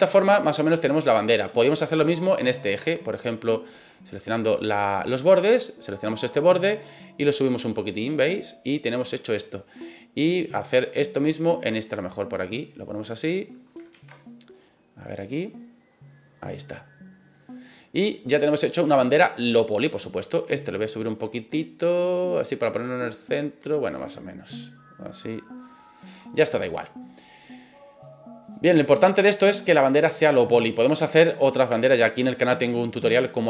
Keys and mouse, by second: 0.7 middle click, 1.9 middle click, 2.6 right click, 2.9 middle click, 5.1 click, 5.9 right click, 6.8-9.3 drag, 10.8 right click, 11.6-13.7 drag, 13.9 ctrl+z, 14.1 middle click, 15.0 right click, 15.6-17.4 drag, 17.7-18.9 middle drag, 19.3 middle click, 20.5 click, 21.0 middle click, 21.5-26.0 drag, 26.2 middle click, 28.0 click, 29.0-29.4 middle drag, 29.6-30.2 middle drag, 31.8 shift+middle click.